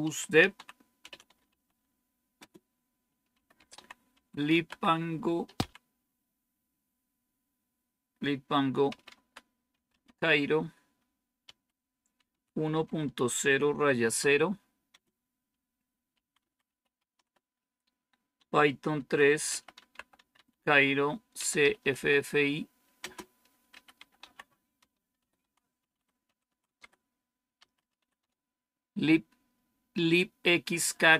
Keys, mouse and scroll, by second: 0.0-6.0 typing, 8.8-28.6 typing.